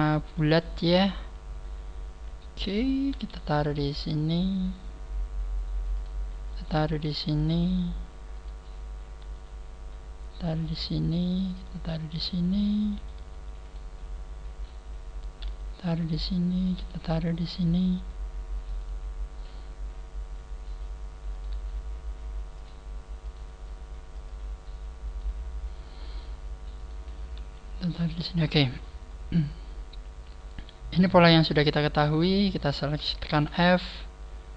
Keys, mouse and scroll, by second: 0.3 shift+middle click, 1.0 right click, 3.1 g, 4.6 click, 4.6 right click, 6.1 right click, 7.3 g, 7.7 click, 8.4 right click, 9.2 g, 10.7 click, 11.4 right click, 11.5 g, 12.1 click, 12.9 shift+middle click, 13.7 shift+middle click, 13.7 right click, 14.2 scroll up 3, 15.4 g, 16.3 click, 16.6 right click, 16.7 g, 18.7 click, 21.3 right click, 21.5 g, 23.3 click, 23.3 right click, 23.7 g, 25.1 right click, 26.7 right click, 26.7 scroll down 3, 27.3 scroll up 3, 27.3 g, 28.7 click, 29.0-29.3 scroll down 4, 30.3 scroll up 1, 31.2 right click, 31.6 shift+right click, 32.1 shift+right click, 32.4 shift+right click, 33.3 f, 34.3 scroll up 3.